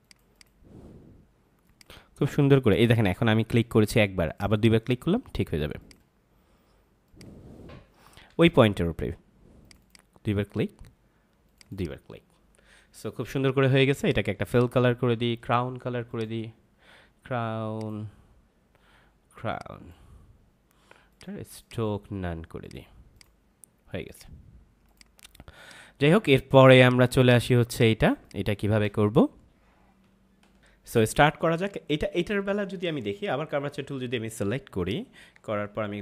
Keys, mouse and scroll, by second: 4.2 click, 8.4 ctrl+z, 9.6 click, 26.6 space, 26.7 click, 27.1 space, 27.2 click, 27.3 space, 27.6 click, 27.7 space, 30.5 ctrl+m, 30.6 click, 34.7 click, 35.3 ctrl+=.